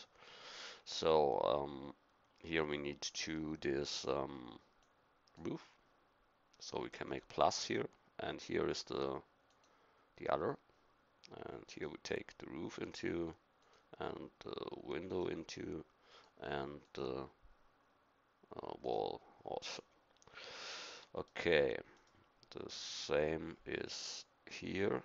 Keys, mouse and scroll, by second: 18.9-21.3 middle drag.